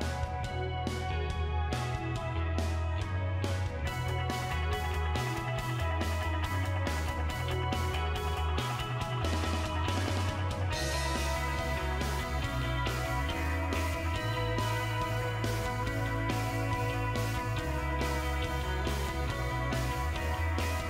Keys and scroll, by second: 10.6 Right, 11.2-11.8 typing, 13.6 BackSpace, 13.9 2.